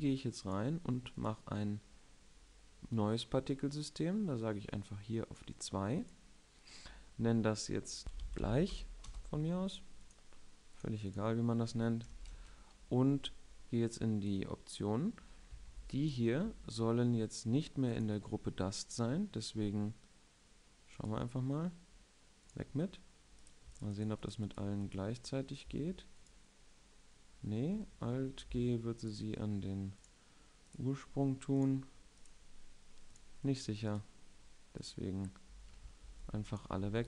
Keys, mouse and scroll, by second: 16.2 a, 16.5 b, 23.2 middle click, 23.4-25.1 drag, 23.4-24.9 right drag, 27.0 middle click, 29.7-34.4 right drag, 30.8-34.4 drag, 36.6 a, 36.8 n.